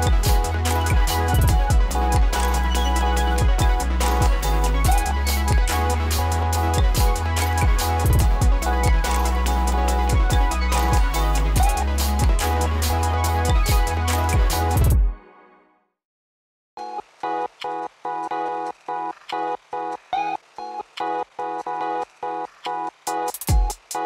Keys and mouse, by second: 4.8 right click, 5.8 click, 6.5 space, 7.9 click, 11.3 space, 12.4-15.2 drag, 15.2 space, 17.1 click, 21.1 click, 21.5 space, 23.2-24.0 drag.